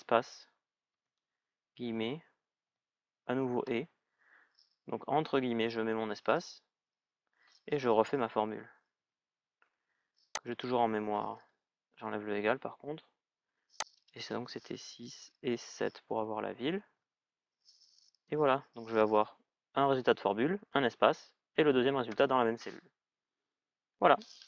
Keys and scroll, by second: 8.7 ctrl+v, 11.1 BackSpace, 14.8 BackSpace, 16.6 shift+è, 21.8 shift+è, 21.9 Return.